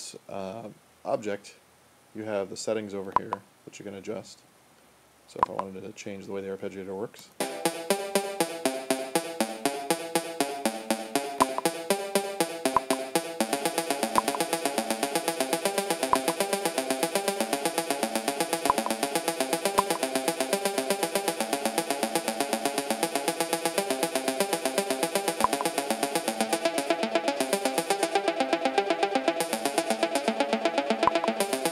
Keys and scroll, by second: 7.2 space.